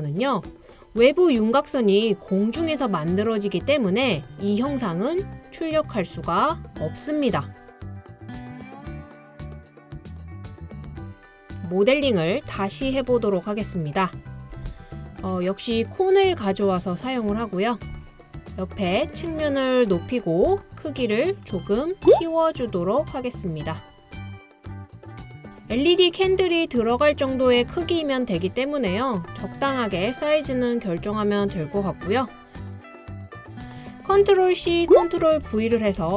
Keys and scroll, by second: 12.9 BackSpace, 34.9 super+c, 35.4 super+v, 36.0 super+v.